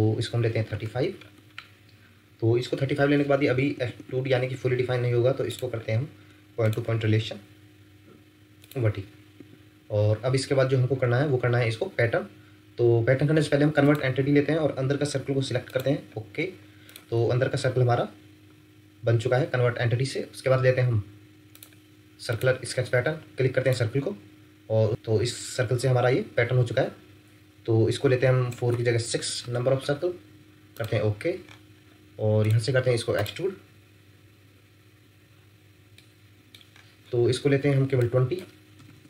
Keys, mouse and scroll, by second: 0.4 typing, 0.7 Return, 3.5 Escape, 3.7 Escape, 3.9 Escape, 4.1 Escape, 4.3 Escape, 4.5 Escape, 4.7 Escape, 6.6 shift+click, 9.3 Escape, 10.9 scroll up 1, 12.7 scroll down 1, 19.0 Escape, 29.1 6, 29.4 Return, 31.4 scroll up 1, 35.9 middle click, 36.7-38.7 scroll up 1, 38.7 typing.